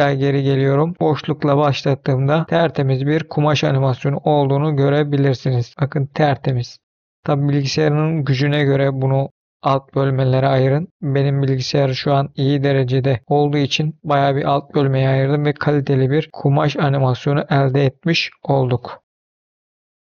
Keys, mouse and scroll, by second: 0.3 middle click, 0.9 space, 2.4 middle click, 4.9 middle click, 5.7 middle click, 8.3 middle click, 9.5 middle click, 11.0 middle click, 12.8 middle click, 13.4 middle click, 14.1 middle click, 16.3 middle click, 17.4 scroll down 1, 19.7 F10.